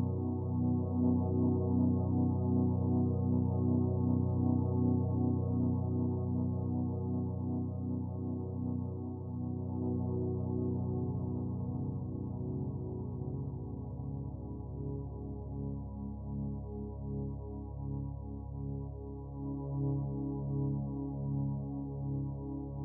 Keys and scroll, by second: 16.4-18.5 typing, 18.8 Return.